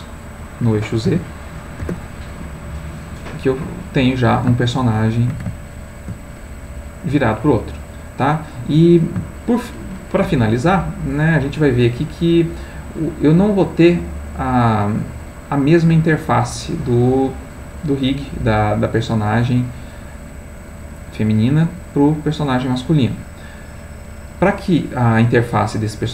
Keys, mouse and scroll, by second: 1.1 z, 1.6 7, 1.8 Return, 3.0-5.5 middle drag, 5.8 ctrl+middle click, 7.4-8.7 middle drag, 9.4 shift+middle click, 14.4 click, 19.1 click, 22.3 click, 24.6 click, 25.7 click.